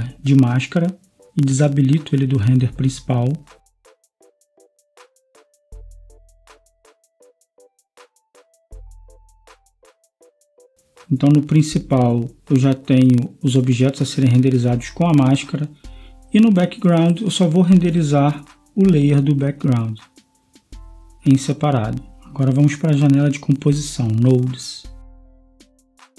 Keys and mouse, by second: 10.4-11.9 drag, 13.7-18.3 drag, 18.9-22.6 drag, 23.4 click, 23.8 click.